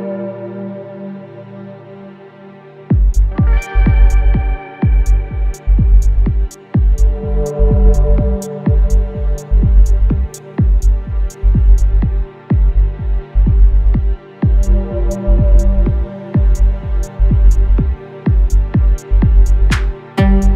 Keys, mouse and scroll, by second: 1.0-3.5 scroll down 1, 3.5 click, 9.4 typing, 10.5 Return, 11.7-20.5 drag.